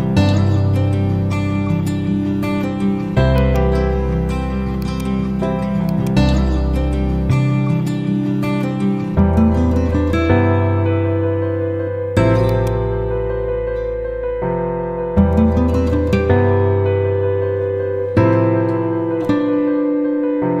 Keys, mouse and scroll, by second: 4.3 ctrl+q, 4.7-5.3 drag, 12.1-12.9 typing, 12.4-12.9 click, 13.3 Up, 20.2-20.6 typing.